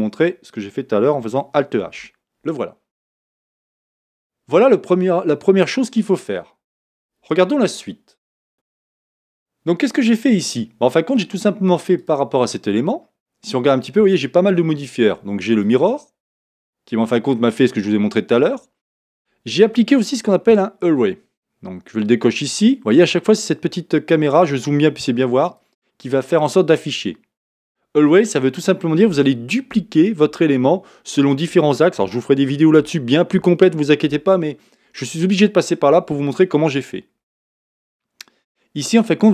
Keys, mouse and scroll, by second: 8.5-12.0 middle drag, 10.1-10.5 scroll down 2, 12.0 click, 15.6 click, 16.5-25.5 middle drag, 19.7 scroll down 2, 25.5 click, 26.4-39.3 middle drag, 36.6 scroll down 1.